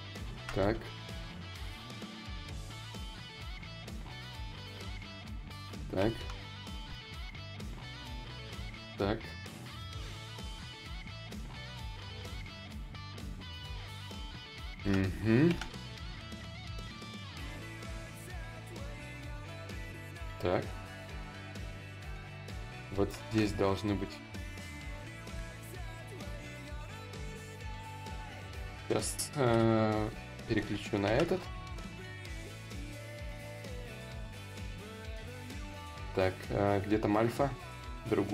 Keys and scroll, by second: 29.1 b, 29.7 d, 30.1 i, 31.3 s, 33.9 ctrl+z, 34.2 ctrl+z.